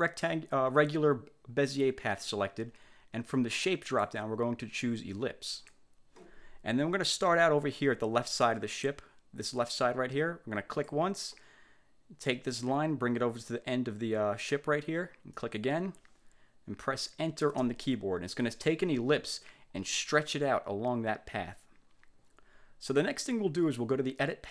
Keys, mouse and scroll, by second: 4.0 click, 5.7 click, 10.8 click, 15.5 click, 17.6 Return.